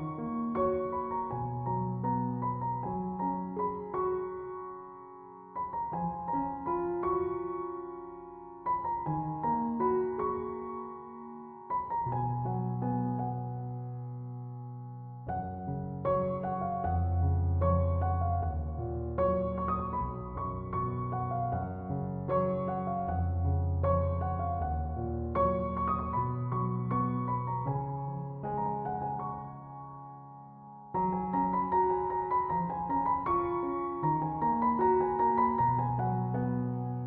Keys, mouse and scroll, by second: 0.6-23.1 alt+shift+drag, 24.2-37.0 drag.